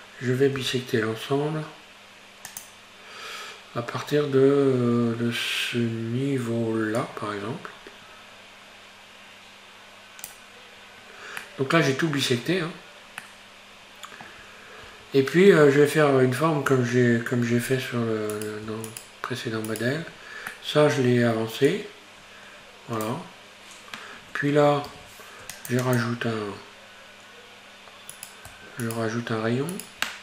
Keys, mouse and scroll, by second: 0.6 q, 11.5-14.3 middle drag, 14.3 Tab, 14.9 Tab, 15.6-17.7 middle drag, 17.7-18.3 scroll up 1, 18.3 right click, 18.9 shift+right click, 19.8 shift+right click, 20.1-20.5 scroll down 3, 20.5-21.7 middle drag, 21.7-24.9 drag, 24.9 ctrl+r, 26.5-27.7 scroll up 1, 27.7-28.2 scroll up 1, 28.2 right click, 28.9 shift+right click, 29.8 shift+right click.